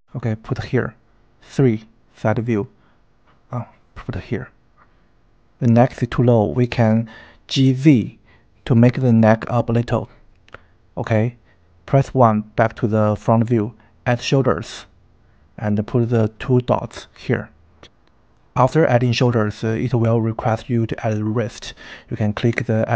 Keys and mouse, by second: 0.3 n, 0.5 click, 1.3 KP_3, 2.3 g, 5.1 click, 5.6 g, 5.8 z, 9.1 KP_1, 13.7-14.9 drag, 17.9 n, 20.8 click.